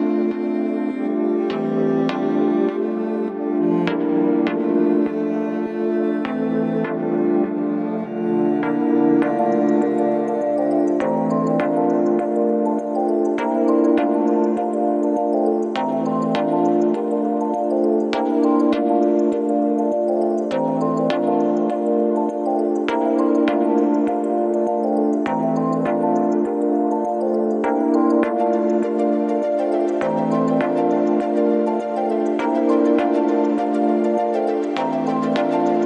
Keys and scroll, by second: 2.3 4, 3.8 3, 4.8 ], 6.7 4, 8.9 3, 10.3 ctrl+d, 10.3 Escape, 12.2 Escape, 21.5 ], 22.3 3, 31.3 ctrl+z, 32.9 ctrl+d, 33.0 Escape.